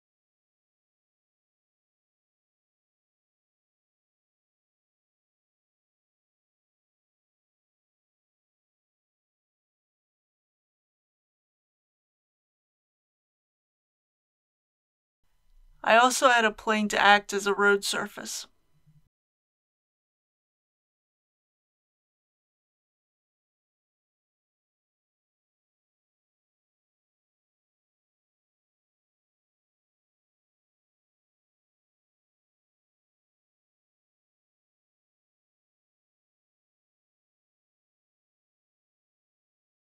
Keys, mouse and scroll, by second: 0.0 click, 1.2 middle click, 1.3-1.8 scroll up 2, 1.8 middle click, 2.0 shift+click, 2.2 middle click, 2.4 click, 2.5 alt+a, 2.9 c, 3.0 right click, 3.0 scroll up 1, 3.1 click, 3.2 right click, 3.3 click, 3.5 alt+a, 3.6 middle click, 3.9 scroll down 1, 4.0 click, 4.4 Return, 4.6 click, 4.7 KP_8, 4.9 click, 5.3 shift+click, 5.3 middle click, 5.4 shift+click, 5.6 middle click, 5.8 click, 5.8 middle click, 5.9 scroll up 1, 6.0 shift+click, 6.2 middle click, 6.6 click, 6.7 alt+a, 6.8 middle click, 7.0 scroll up 1, 7.2 click, 7.3-8.2 typing, 7.7 click, 8.3 click, 8.7 click, 9.0 Return, 9.2 click, 9.5 scroll down 1, 9.7 alt+a, 9.8 click, 10.0 shift+y, 10.1 Return, 10.2 click, 10.7 scroll down 1, 10.8 alt+a, 10.9 middle click, 11.2 Tab, 11.3 click, 11.3 Return, 11.4 click, 11.8 alt+a, 12.0 middle click, 12.0-13.1 typing, 12.1-12.5 scroll up 2, 12.5 click, 12.6 middle click, 12.9 click, 13.2 right click, 13.2 shift+middle click, 13.4 click, 14.4 alt+a, 14.6 middle click, 15.0 ctrl+s, 15.1 KP_1, 15.2 scroll down 1, 15.8 shift+a, 17.5 click, 19.0 g, 19.3 z, 21.7 click, 22.4 s, 23.5 KP_5, 23.6 KP_0, 25.2-26.0 scroll down 1, 26.0-28.2 middle drag, 29.9 click, 31.6-32.0 typing, 32.2 Return, 33.8-37.2 drag.